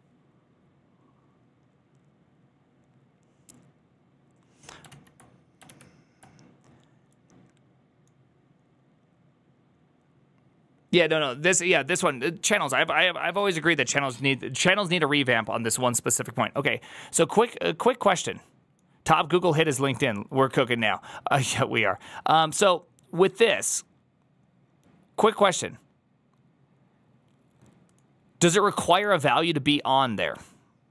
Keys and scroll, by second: 5.6 alt+{, 5.6 alt+[.